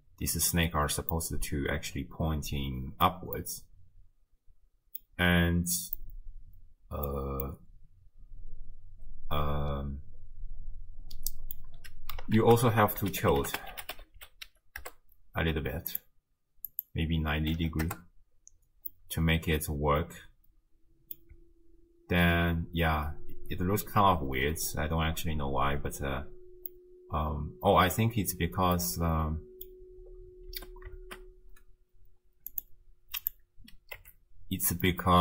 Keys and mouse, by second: 1.2-3.1 drag, 3.5 click, 6.0-7.1 drag, 7.5-11.6 drag, 12.4 ctrl+a, 16.7-17.9 drag, 18.9-21.2 middle drag, 21.3 space, 26.7-28.0 middle drag, 28.8-29.7 middle drag, 30.5 space, 32.5 click, 33.2 click, 34.0 Tab, 35.0 middle click.